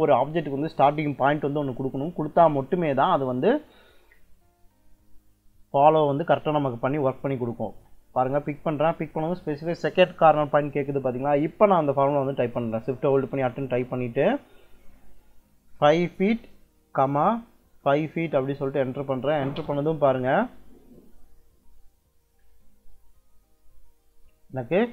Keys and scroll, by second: 13.1 shift+2, 15.6 5, 16.1 ', 17.7 5, 18.2 ', 19.4 Return.